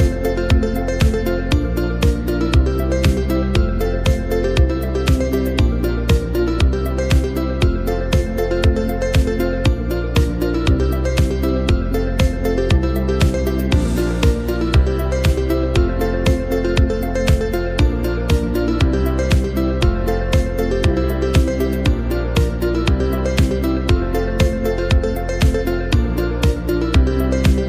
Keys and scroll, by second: 2.7 super+0, 17.2 super+z, 26.8 z.